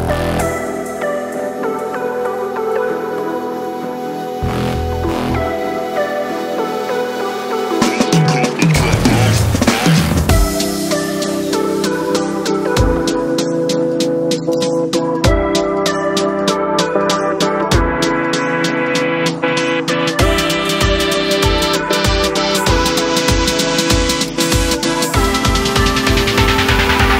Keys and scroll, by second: 19.7-23.9 typing.